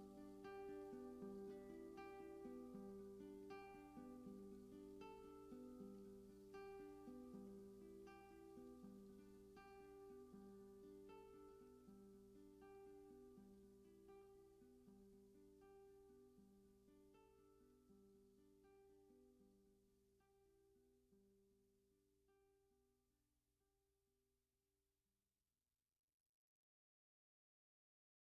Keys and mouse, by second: 0.0-11.2 typing, 12.9-18.4 typing, 22.1 click.